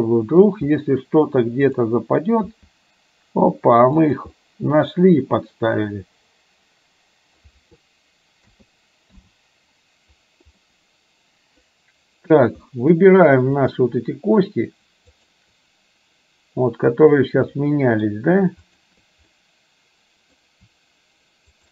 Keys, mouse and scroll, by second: 1.7 click, 2.5 g, 4.6-7.5 middle drag, 8.5 a, 9.2 i, 10.7-11.7 middle drag, 12.8 middle drag, 13.6 click, 15.2 shift+click, 17.7 middle click, 19.5-20.3 middle drag.